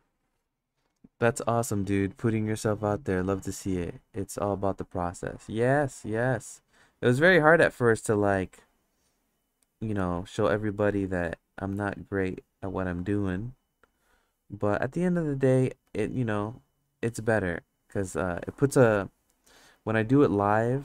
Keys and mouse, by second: 5.6-7.2 drag, 8.2-9.9 drag, 10.5 ctrl+z, 11.0 click, 11.7 ctrl+z, 12.2-13.9 drag, 14.9 click, 15.8 ctrl+z, 16.2 click, 17.8 click, 18.5 ctrl+z, 18.9 click, 19.5 ctrl+z, 19.9 click.